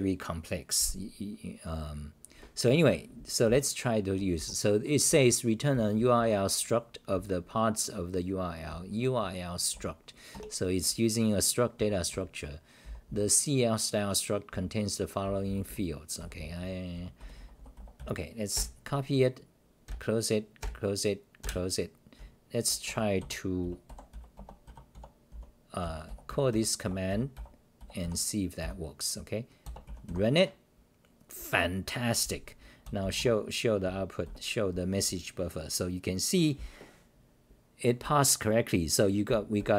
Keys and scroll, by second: 2.2-2.7 scroll up 15, 3.0-3.4 scroll up 6, 3.4-4.3 d, 4.4 t, 5.1 r, 8.3-10.2 typing, 10.3 ctrl+g, 11.8 g, 12.8 scroll, 12.8 t, 13.1 t, 14.5-18.5 typing, 18.5 ctrl+w, 19.9 ctrl+w, 20.6 ctrl+w, 21.4 ctrl+w, 22.2-28.6 typing, 22.8 Return, 33.8 Delete, 33.8 w, 34.2 c, 35.9-36.3 scroll down 1, 38.0-38.5 scroll down 4, 38.0 r, 39.3 g, 39.6 r.